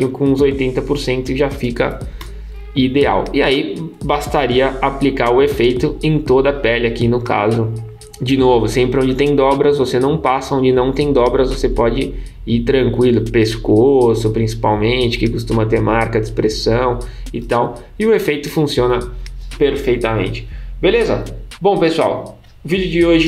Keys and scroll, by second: 2.2 super+0.